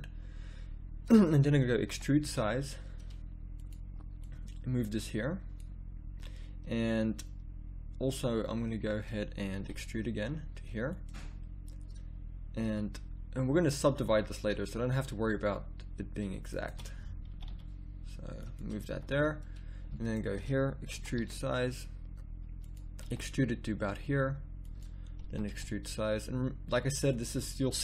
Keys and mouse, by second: 0.2-2.2 middle drag, 1.9 e, 4.2-9.5 drag, 9.5 e, 12.6 a, 17.3-18.4 drag, 17.3 g, 18.8 a, 20.0-21.1 drag, 20.9 e, 23.0 e, 25.3 e.